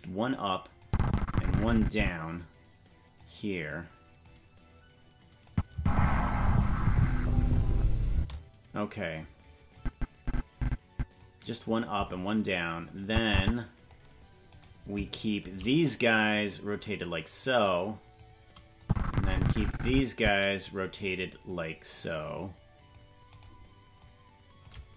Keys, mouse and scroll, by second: 0.8-2.1 drag, 3.2-4.3 drag, 5.5 click, 5.7 space, 8.1 space, 9.8-11.2 drag, 13.0 click, 14.6 right click, 15.2-16.3 shift+right drag, 16.3-18.2 drag, 18.8-20.6 drag, 21.5-22.8 drag, 23.4 right click, 24.0 click.